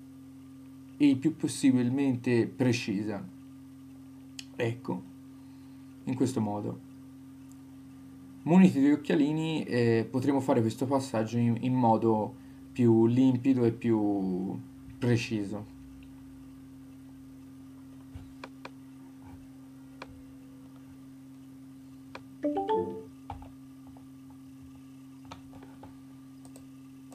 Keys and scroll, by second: 1.7 shift+Left, 15.6 super+d, 23.3 Left, 25.4 Return.